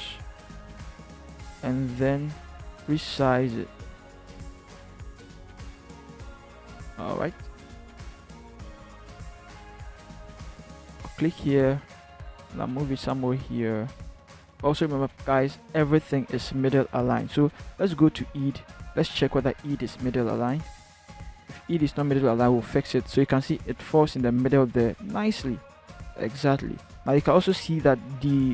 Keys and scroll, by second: 7.4 Return, 8.0 v, 14.7 ctrl+h, 19.9 ctrl+t, 25.6 Return.